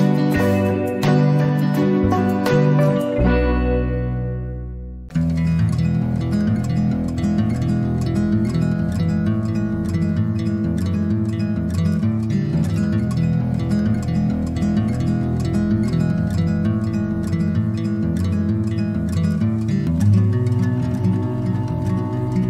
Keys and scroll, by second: 13.0-14.3 typing, 16.6 ctrl+z.